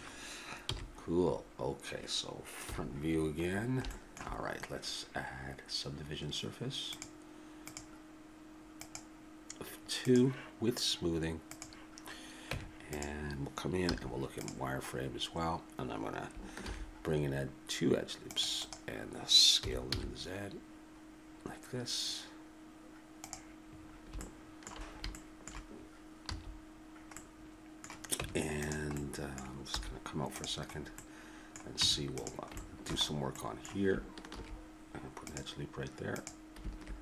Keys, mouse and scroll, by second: 0.6 n, 1.3-3.5 middle drag, 2.6 KP_1, 3.5 click, 6.9-10.0 drag, 11.5-13.0 drag, 12.5 Tab, 13.9 z, 16.6 ctrl+r, 19.6 s, 23.8-26.2 middle drag, 26.2 a, 28.2 Tab, 29.7 z, 31.8 Tab, 34.3 ctrl+r.